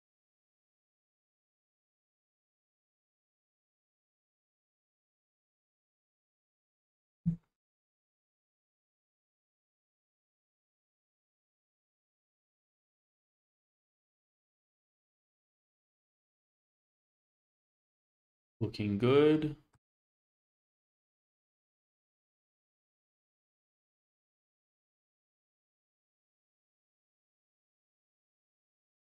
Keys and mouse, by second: 0.8 click, 1.2 Tab, 2.2 g, 3.6 g, 3.7 y, 5.4-6.2 middle drag, 6.6 shift+middle click, 7.0 click, 8.1 shift+middle drag, 9.2-17.7 middle drag, 18.3-19.7 middle drag, 20.1 shift+middle drag, 20.5-22.0 middle drag, 24.8-25.9 drag, 25.9-26.5 middle drag, 26.7 shift+middle drag, 28.0 alt+z, 28.6-29.0 shift+middle drag.